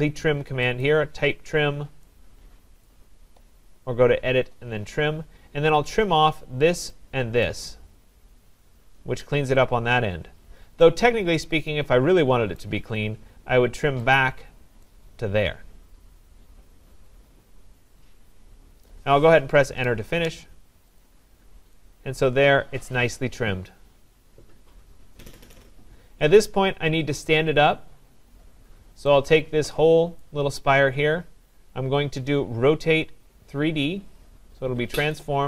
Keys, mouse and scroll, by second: 0.9 click, 2.9 right click, 5.9 click, 6.9 right click, 6.9 click, 12.6 right click, 14.2 click, 18.9 right click, 19.7 Return, 21.0 click, 21.4 scroll, 23.3 middle click, 25.5 right click, 25.8-26.7 scroll, 28.3 scroll, 30.2 click, 35.1 click.